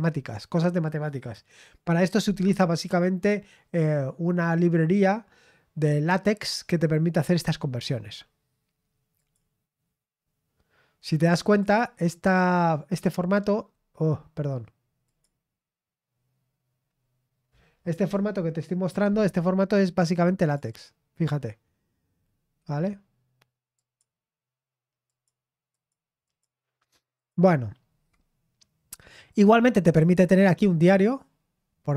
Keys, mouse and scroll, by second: 9.1 click, 11.5 click, 12.3-13.6 drag, 15.0 click, 20.4 click, 20.8 click, 23.7 click, 25.0 click, 25.7 click, 26.2 click, 27.1 click, 27.4 click, 29.2 click, 29.8 click, 30.3 click, 31.4-31.8 scroll down 1.